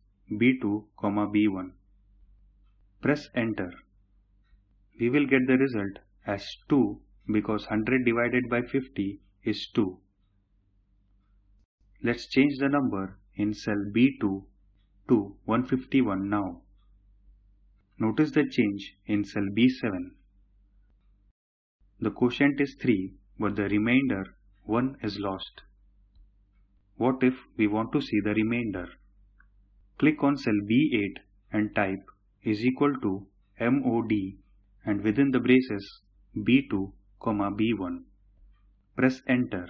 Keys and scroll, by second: 2.8 Return.